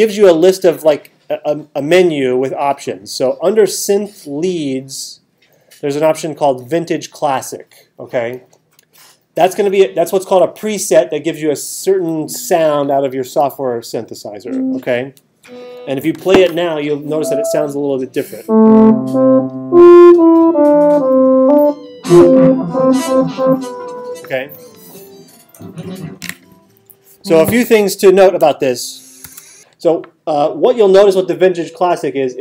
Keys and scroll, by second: 29.2 alt+super+8.